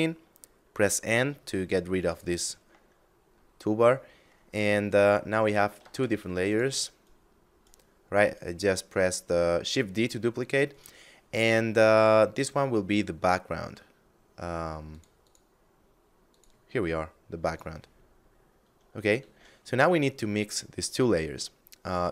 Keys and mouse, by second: 1.4 n, 2.5 middle click, 4.3 right click, 5.2 shift+d, 5.9 click, 6.3 right click, 10.1 right click, 10.6 middle click, 11.7 click, 14.3 click, 17.3 middle click, 18.7 shift+a.